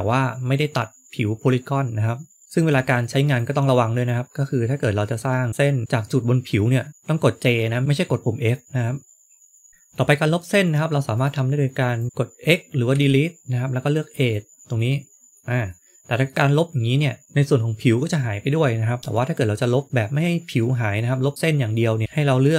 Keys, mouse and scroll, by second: 2.4 click, 2.5 click, 4.4-5.8 scroll up 1, 5.8 shift+middle click, 9.2-9.7 scroll down 1, 9.7 click, 9.7 shift+middle click, 9.7 scroll up 1, 12.8 x, 14.7 middle click, 15.6 middle click, 19.0 shift+middle click, 22.0 ctrl+z.